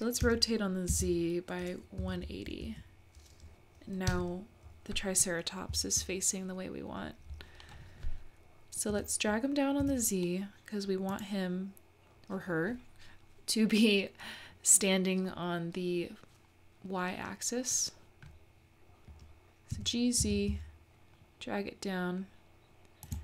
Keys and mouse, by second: 0.2 r, 8.9 g, 19.7 g.